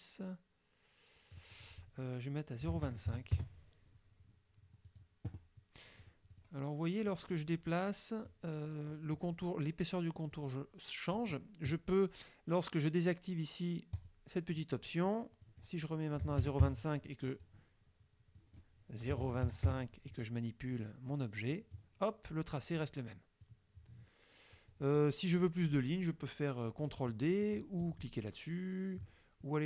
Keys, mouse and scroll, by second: 1.4 click, 2.7 KP_0, 2.8 KP_Decimal, 2.9 KP_2, 3.1 KP_5, 3.4 KP_Enter, 4.9 click, 6.1 click, 6.5 click, 7.1-8.5 drag, 10.4-11.4 drag, 14.0 click, 15.5 click, 16.2 KP_0, 16.4 KP_5, 16.7 KP_Enter, 18.4 click, 19.1 KP_0, 19.3 KP_2, 19.5 KP_5, 19.7 KP_Enter, 21.2 click, 23.5-24.9 drag.